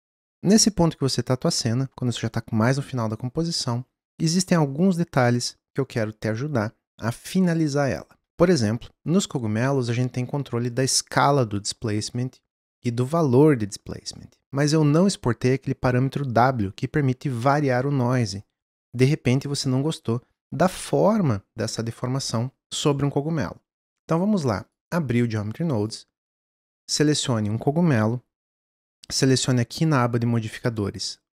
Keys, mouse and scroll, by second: 0.1 click, 24.6-27.6 drag, 29.7 click.